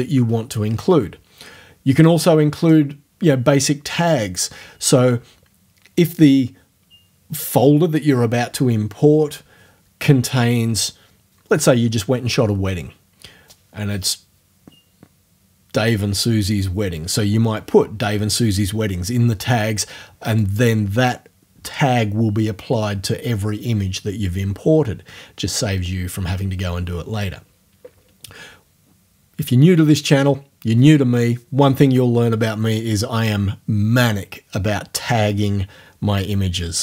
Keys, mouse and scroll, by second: 2.6 click, 20.4 click.